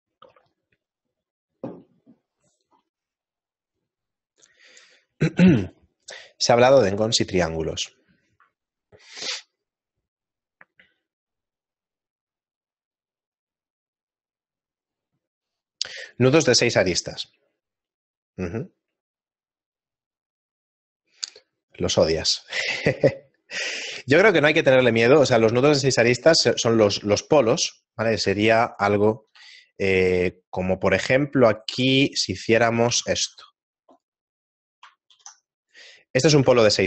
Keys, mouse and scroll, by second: 28.5 shift+middle click, 29.5 KP_7, 30.4 shift+middle click, 31.6 middle click, 31.6 right click, 33.5 Tab, 33.5 e, 33.5 s, 35.1 alt+m, 36.1 middle click.